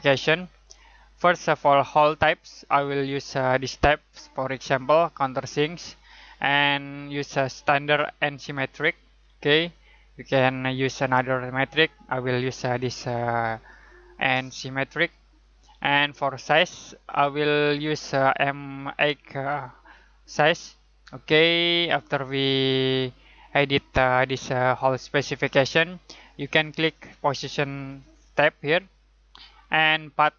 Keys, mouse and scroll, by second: 7.1 click, 9.2-10.1 scroll up 1, 14.1 click, 19.4 click, 28.4 click.